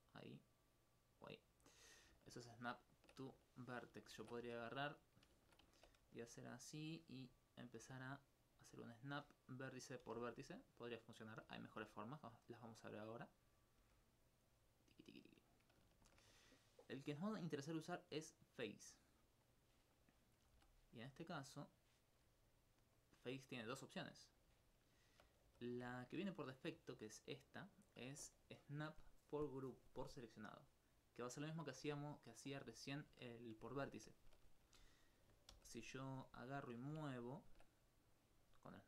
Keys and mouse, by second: 2.0 right click, 6.7 click, 7.5 right click, 7.8 g, 9.0 click, 9.6 right click, 10.1 g, 11.2 click, 11.5 g, 12.8 click, 13.5 right click, 13.8 g, 15.4 click, 17.1 click, 20.5 a, 21.7 click, 22.2 s, 23.0 click, 24.1 s, 24.4 click, 24.7 alt+click, 25.5 alt+g, 25.8 click, 26.0 alt+click, 33.3 alt+click, 34.0 ctrl+alt+click, 35.6 g, 37.8 right click.